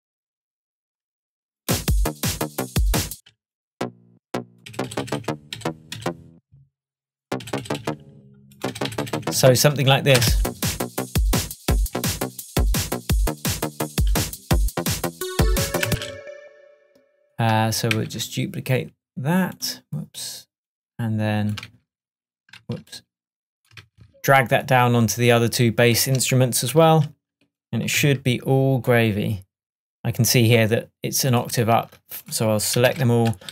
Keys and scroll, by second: 3.2 space, 4.8 Up, 7.5 Up, 15.9 space, 33.0 super+a.